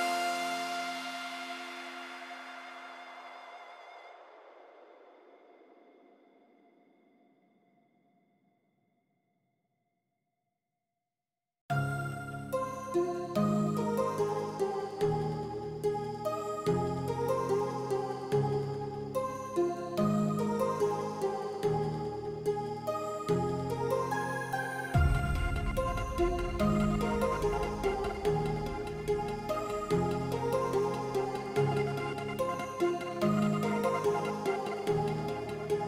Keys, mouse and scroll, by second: 0.0 shift+middle click, 0.4 shift+middle click, 0.9 shift+middle click, 1.5 shift+middle click, 2.1 shift+middle click, 3.4 s, 9.2 middle click, 9.6 shift+middle click, 10.9 g, 16.1 shift+middle click, 16.4 ctrl+s, 17.1 middle click, 17.4 middle click, 17.9 Tab, 18.3 shift+middle click, 18.7 KP_0, 19.7 shift+middle click, 23.6 shift+middle drag, 24.9 shift+middle drag, 25.8 g, 27.3 shift+middle click, 28.1-31.1 drag, 32.6 shift+middle drag, 33.9-35.3 drag.